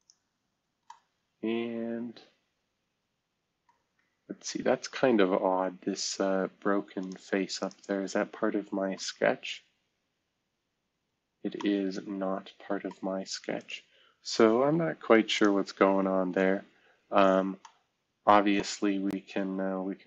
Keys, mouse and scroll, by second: 4.0-5.2 scroll up 2, 5.2-6.0 scroll down 2, 6.0 scroll up 2, 8.9 space, 9.7-10.9 scroll down 1, 10.9 scroll down 1, 11.0-11.8 scroll up 1, 11.5 middle click, 14.5 Delete, 16.1 Delete.